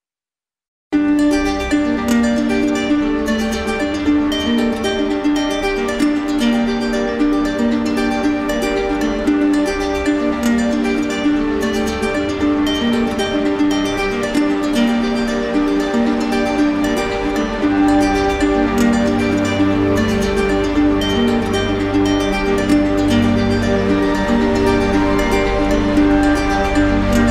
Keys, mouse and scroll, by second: 2.3 click, 3.5 click, 4.2 click, 5.1 click, 5.7 click, 6.1 ctrl+z, 8.3 click, 14.8 click, 15.5 click, 15.9 click, 16.2 shift+click, 17.1 click, 17.5 alt+click, 18.8 alt+click, 19.1 alt+click, 19.7 click, 21.0 click, 26.2 click, 26.5 shift+click.